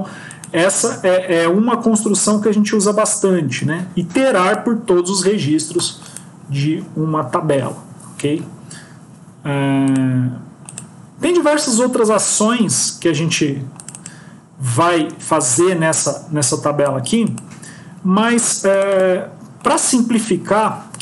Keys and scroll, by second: 1.4 ctrl+x, 2.2 ctrl+s.